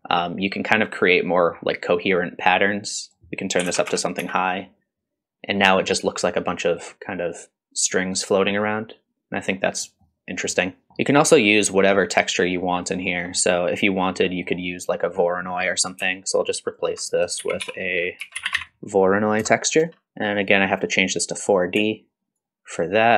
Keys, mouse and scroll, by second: 0.4-1.6 middle drag, 3.0-4.7 drag, 3.9 KP_0, 6.3 middle drag, 6.9 middle drag, 8.3 middle drag, 9.3-9.8 scroll down 1, 9.8 middle drag, 10.9 middle click, 10.9 scroll up 3, 13.0-13.3 scroll down 2, 13.3 middle click, 14.2 middle click, 16.1 alt+click, 17.0 click, 17.4 shift+a, 20.1 alt+right click, 20.3-21.9 drag, 21.9-22.4 alt+right drag.